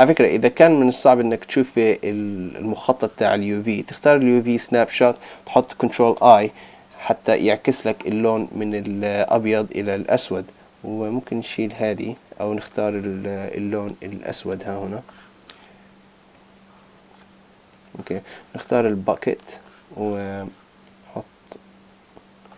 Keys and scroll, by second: 6.2 super+i.